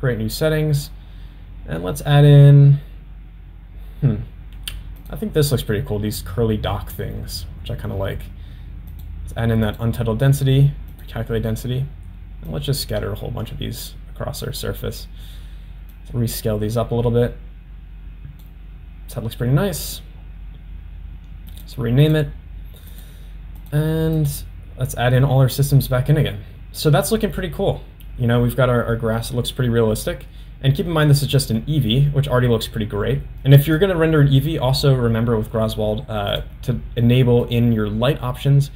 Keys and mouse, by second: 0.8-6.2 drag, 9.0-10.1 drag, 11.0-11.5 drag, 12.8-14.7 drag, 16.0-18.5 drag, 21.5-22.4 drag, 23.1 click, 23.8 click, 24.4 click, 33.7-34.1 drag, 37.5 click.